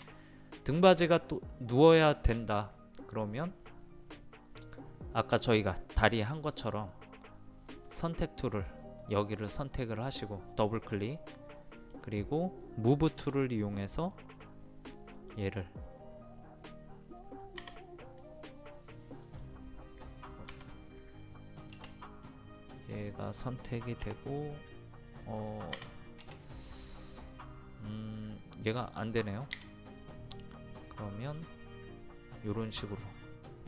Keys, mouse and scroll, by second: 3.1-3.5 scroll up 1, 7.7 click, 11.3 middle click, 13.2 m, 15.2 click, 17.6 Escape, 18.0 middle click, 19.2-20.4 drag, 20.5 Escape, 21.2 middle click, 22.6 click, 24.0 m, 24.5 click, 25.7 Escape, 26.4-28.4 middle drag, 31.2 click.